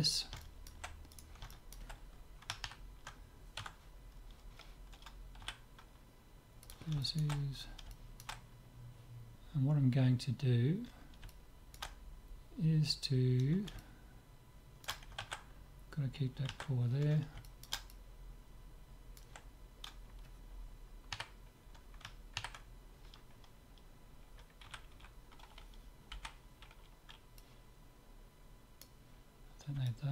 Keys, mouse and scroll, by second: 0.4-3.5 middle drag, 1.2-3.1 drag, 3.7 Tab, 4.0-6.0 middle drag, 5.4 z, 6.7-8.6 drag, 8.6-10.4 middle drag, 11.3-13.1 middle drag, 13.3-13.8 scroll up 1, 13.8-15.3 middle drag, 17.5-19.9 middle drag, 21.1 KP_3, 24.7 a, 25.0 a, 26.2 b, 29.9-30.1 middle drag.